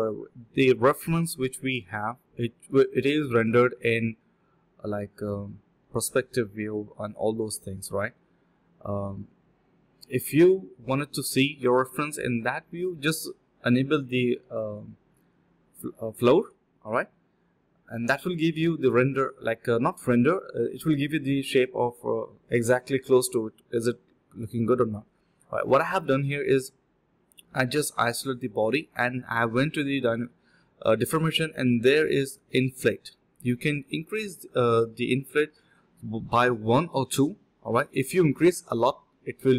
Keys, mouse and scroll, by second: 0.0 alt+click, 0.6 scroll down 1, 0.8 middle click, 2.0 scroll up 1, 2.2 middle click, 2.6-3.6 scroll up 2, 2.9 middle click, 3.6 scroll down 1, 3.8 middle click, 4.6 scroll down 1, 4.8 middle click, 5.2 scroll up 1, 5.4 middle click, 6.2 scroll down 1, 6.3 middle click, 7.0 scroll up 1, 7.2 middle click, 7.7 alt+click, 7.9 alt+click, 8.0 alt+click, 8.5 alt+click, 9.5-9.9 typing, 11.0 ctrl+alt+shift+click, 12.1 ctrl+shift+click, 12.2 ctrl+shift+q, 12.3 ctrl+shift+click, 12.5 alt+click, 12.8 alt+click, 13.4 typing, 14.5 shift+click, 16.1 alt+click, 17.3 alt+click, 17.5 alt+click, 17.7 alt+click, 18.1 alt+click, 23.6 alt+click, 23.8 alt+click, 23.9 alt+double click, 24.0 alt+double click, 24.2 alt+click, 24.7 ctrl+shift+click, 25.4 alt+click, 25.7 f, 26.4 alt+click, 26.7 alt+click, 27.0 alt+click, 27.4-29.1 typing, 30.1 typing, 30.4 shift+click, 31.6 alt+click, 32.0 shift+click, 33.1 alt+click, 33.6 alt+click, 33.8 alt+click, 34.0 alt+click, 35.1 typing, 35.4 ctrl+b, 36.7 typing, 39.1 alt+click, 39.4-39.5 typing.